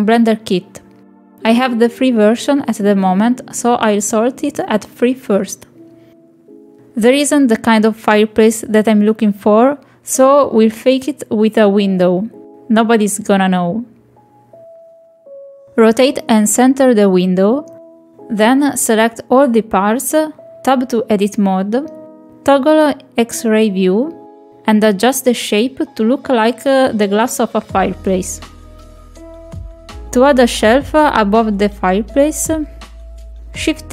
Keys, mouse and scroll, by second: 2.0-3.6 drag, 3.9-5.2 drag, 10.0 middle click, 10.2 shift+middle click, 10.7 click, 11.3-11.6 middle drag, 11.8 r, 12.9 middle click, 13.1-14.3 drag, 14.5 shift+middle click, 15.0 click, 15.6 ctrl+click, 16.1 shift+middle click, 16.3 click, 17.5 middle click, 18.6 click, 19.4 KP_Decimal, 19.7 click, 20.5 shift+drag, 21.9 Tab, 22.5 click, 22.8 click, 23.2 click, 23.3 click, 23.9 click, 24.2 middle click, 24.6 click, 25.0 shift+middle click, 25.2 middle click, 25.5 ctrl+click, 26.4 middle click, 26.5 KP_3, 27.3 click, 28.6-29.9 drag, 30.0 click, 31.1 Tab, 31.4 middle click, 32.9 shift+middle click.